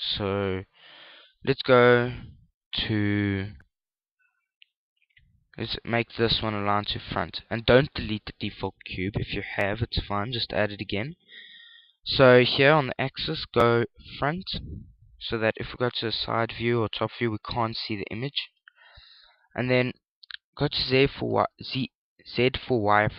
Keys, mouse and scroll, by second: 0.0 KP_1, 5.5 click, 9.9 click, 14.0 click, 17.4 KP_3, 17.4 KP_7, 19.0 KP_1, 21.4 z.